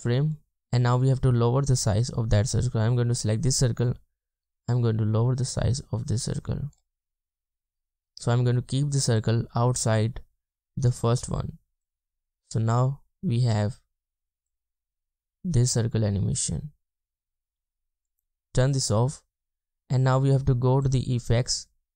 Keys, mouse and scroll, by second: 1.9 scroll down 1, 7.1-8.2 scroll up 1, 13.0 scroll down 1.